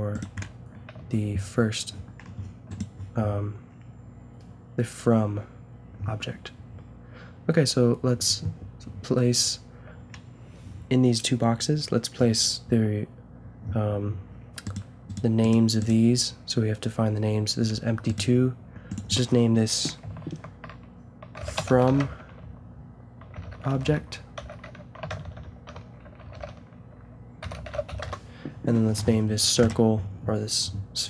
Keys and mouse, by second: 1.0 a, 2.7-4.4 drag, 14.6-17.7 drag, 17.7 g, 18.9-20.7 drag, 25.2 BackSpace, 25.3 BackSpace.